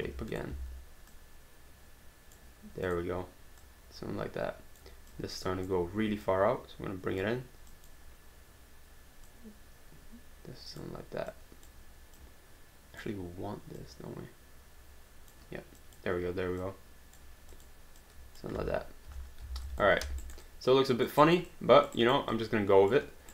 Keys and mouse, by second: 0.5 w, 1.1 click, 2.9 click, 5.1 click, 6.2 click, 7.7 click, 9.3 click, 11.3 click, 13.8 click, 15.8 click, 18.6 space, 19.7 alt+d, 19.7 alt+click, 20.0 alt+d, 20.3 alt+right click, 20.5 alt+click, 21.2 alt+right click, 21.5 alt+click, 22.0 alt+right click, 22.3 alt+click.